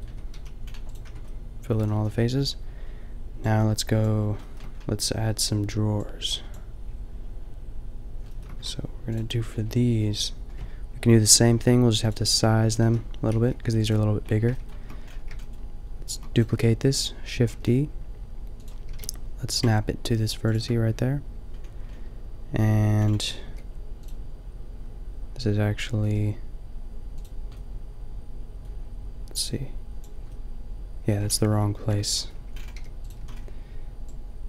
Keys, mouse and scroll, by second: 0.1 Tab, 0.4 a, 1.0 Tab, 1.8 a, 2.0 a, 9.5-11.3 drag, 11.3 ctrl+l, 13.4 ctrl+l, 13.4 g, 14.2 middle click, 15.0 middle click, 16.1 shift+d, 17.4 g, 18.8 g, 21.5-23.0 middle drag, 23.5 g, 24.6-26.1 drag, 26.1 g, 27.6-29.3 drag, 31.3 ctrl+z, 31.5 ctrl+z, 32.1 ctrl+z, 32.8 g, 33.2 a.